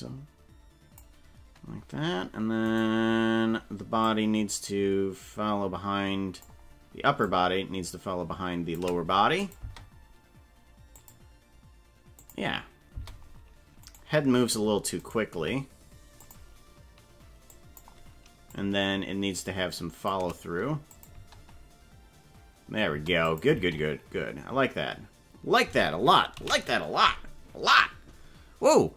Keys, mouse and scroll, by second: 0.4 click, 2.8 right click, 4.0-6.5 drag, 7.3-8.9 shift+drag, 9.5 click, 9.6 space, 11.0 click, 12.3 click, 12.9 space, 14.0 right click, 15.1 right click, 15.3 g, 17.5 click, 18.5-20.3 shift+drag, 21.1 click, 21.1 space, 23.1 space, 23.2 click, 23.5 space, 25.7 space, 26.4 ctrl+s.